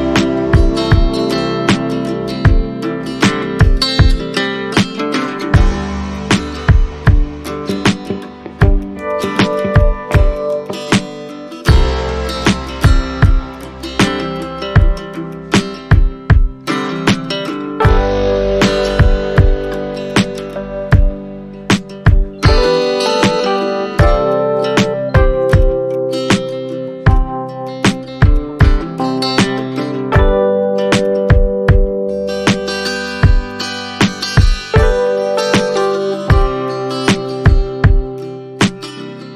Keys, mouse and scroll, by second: 6.3-6.7 scroll down 1, 7.0-7.5 scroll down 1, 7.5 alt+middle click, 8.0 alt+middle click, 12.6-13.0 scroll down 1, 13.5 shift+click, 20.0 shift+click, 24.7-25.1 scroll up 1, 25.1-25.6 scroll down 1, 25.9 shift+click, 27.9 shift+click, 30.3 alt+middle click, 33.4 shift+click.